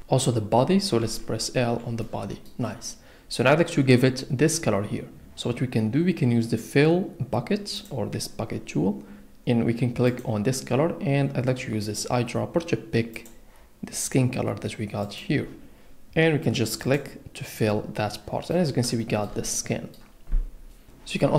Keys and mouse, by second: 1.0 l, 2.0 click, 7.7 click, 10.1 click, 15.0 click, 16.8 click, 19.0 shift+middle click.